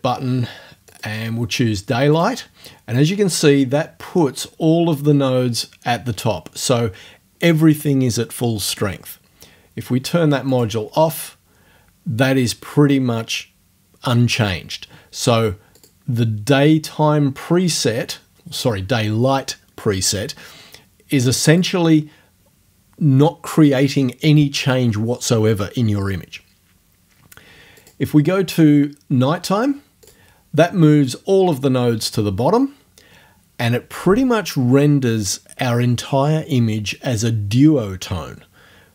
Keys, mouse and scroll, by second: 0.9 click, 1.2 middle click, 2.2 click, 2.4-3.6 middle drag, 10.5 click, 15.8 click, 17.7 click, 21.5 click, 27.8 click, 30.1 click.